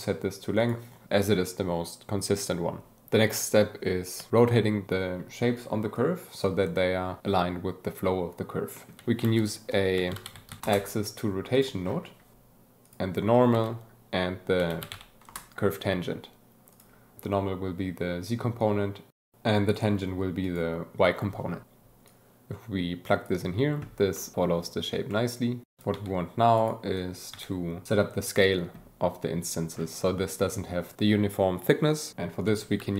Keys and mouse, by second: 5.9 click, 8.7 click, 9.0 shift+a, 11.5 click, 12.5 shift+a, 16.6 click, 17.5-18.0 drag, 18.6-20.2 drag, 21.4 click, 22.0-23.2 drag, 24.1-25.3 drag, 25.8 alt+a, 25.9 g, 26.6 click, 26.9 click, 27.3 g, 32.7 shift+a.